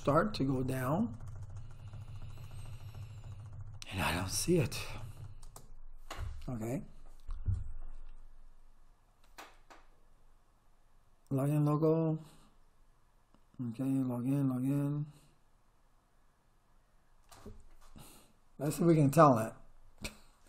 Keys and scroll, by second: 5.5 space.